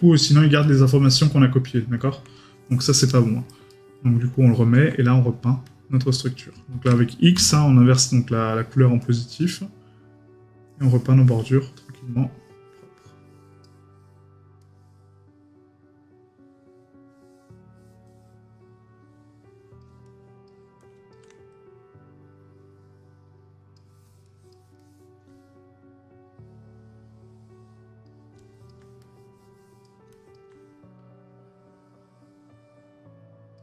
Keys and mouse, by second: 0.6 right click, 3.1 right click, 4.4 middle click, 24.8 middle click.